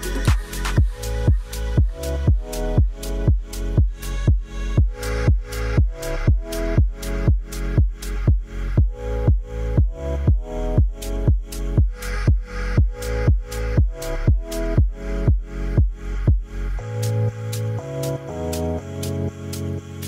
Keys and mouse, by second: 0.2 shift+middle click, 0.6 middle drag, 1.1 click, 2.3 KP_Decimal, 3.2 drag, 3.9 1, 4.3 click, 6.3 click, 6.7-7.7 drag, 8.9 e, 9.1 z, 10.6 3, 11.5 2, 12.6 alt+click, 13.8 shift+click, 14.8 f, 15.0-15.3 middle drag, 16.3 click, 16.6 middle drag, 17.2 shift+click, 18.4 f, 19.1 click, 19.4 alt+click.